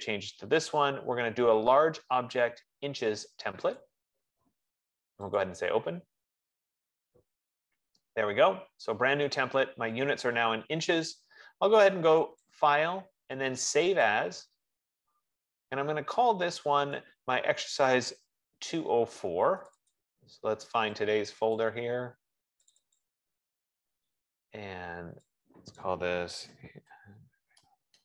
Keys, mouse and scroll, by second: 0.6 click, 4.3 click, 5.9 click, 12.7 click, 14.6 click, 17.3 click, 20.7 click, 20.8 click, 21.1 F15, 21.6 click, 22.0 click, 23.1-28.0 drag, 26.7-28.0 typing.